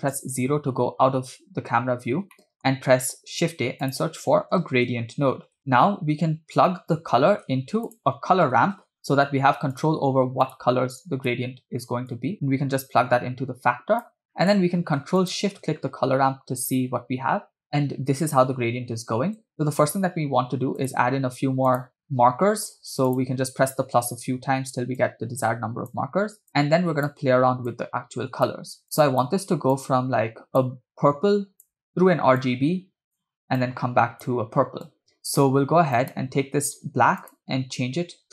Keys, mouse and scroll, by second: 0.3 KP_0, 1.8-2.3 scroll down 2, 2.5 middle drag, 3.1 scroll down 1, 3.1 shift+a, 5.7 middle click, 7.4 shift+a, 11.2 click, 12.1-14.2 drag, 14.5 middle click, 15.7 ctrl+shift+click, 19.5 scroll up 2, 20.8 click, 21.9 click, 23.1 click, 25.0-26.1 drag, 26.5-27.3 drag, 27.9-28.8 drag, 29.0 click, 29.9-30.9 drag, 31.2-31.9 drag, 32.6-33.5 drag, 33.8-34.5 drag, 35.0 drag, 36.0 click, 37.4 click.